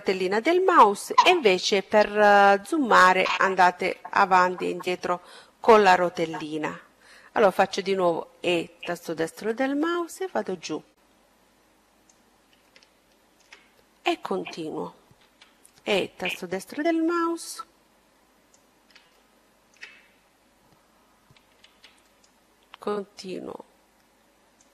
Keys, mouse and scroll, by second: 1.5-2.1 scroll up 1, 2.1-3.4 scroll up 1, 3.4-3.9 scroll down 1, 7.2 e, 8.8-10.6 drag, 11.5-13.3 middle drag, 14.1 e, 15.5-17.3 drag, 18.0-19.9 middle drag, 20.5 e, 22.0-23.9 drag, 23.9-24.7 middle drag.